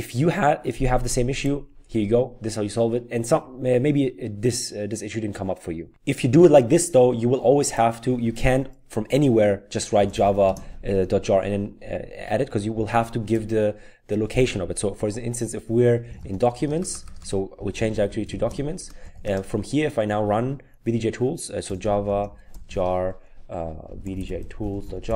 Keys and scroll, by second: 9.7-10.7 typing, 15.9-19.6 typing, 21.4-25.1 typing.